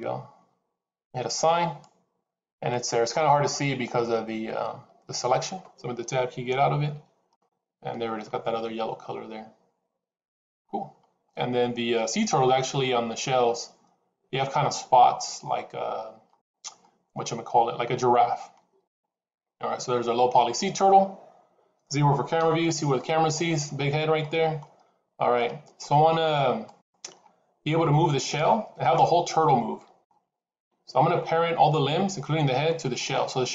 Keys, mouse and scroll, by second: 1.5 click, 3.0-3.5 scroll up 1, 4.5-6.1 scroll up 2, 6.7 Tab, 7.3 middle click, 10.5-12.1 scroll up 1, 16.4 scroll down 2, 16.7 middle click, 21.2-22.3 scroll down 1, 22.3 KP_0, 24.1 middle click, 24.7-25.2 scroll down 3, 25.2 middle click, 26.5 click, 27.2 scroll down 3, 28.1 click, 28.9 middle click, 30.5 KP_7, 32.6 shift+middle click.